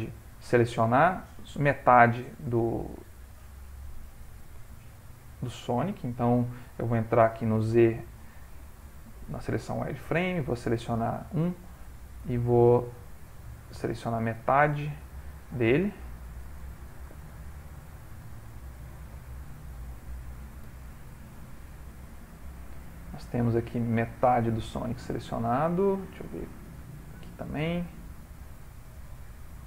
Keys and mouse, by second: 0.2 Tab, 3.0 ctrl+middle click, 7.2 z, 10.4 1, 12.2 click, 14.8 shift+middle click, 16.6 shift+middle click, 17.0 shift+middle click, 17.3 shift+click, 18.6 ctrl+middle click, 19.4 shift+middle click, 20.7 z, 22.7 ctrl+middle click, 23.0 ctrl+middle click, 23.1 shift+middle click, 23.3 shift+middle click, 23.7 ctrl+middle click, 23.8 shift+middle click, 25.6 alt+shift+click, 26.7 shift+middle click, 27.8 shift+middle click, 28.5 ctrl+middle click.